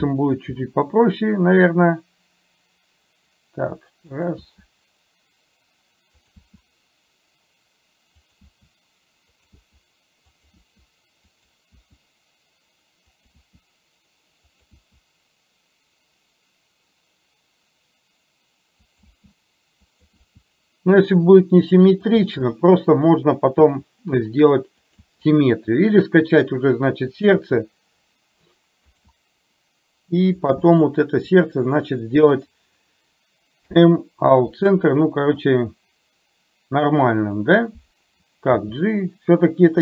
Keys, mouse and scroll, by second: 0.6 e, 4.5 e, 6.5 e, 10.6 e, 13.5 e, 14.9 e, 19.1 e, 20.2 e, 25.1 e, 27.5 e, 33.6 m, 37.4 click.